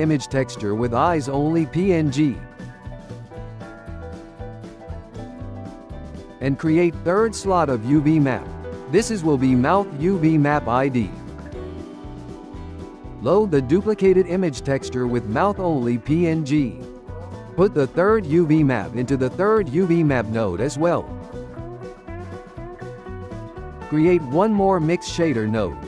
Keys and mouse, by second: 0.0 click, 3.9 Tab, 5.6 click, 6.9-8.1 drag, 8.2 click, 11.1 Tab, 12.3-13.8 shift+middle drag, 13.8 click, 18.0-20.3 drag, 20.3-22.8 ctrl+middle drag, 22.8 shift+a.